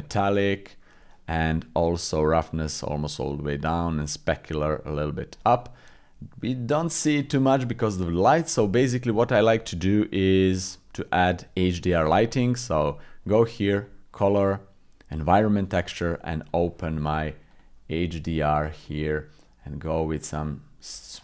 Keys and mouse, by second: 0.5 middle click, 2.2 click, 3.9 click, 4.7 click, 5.5-7.6 middle drag, 15.3 click, 16.5-18.8 drag.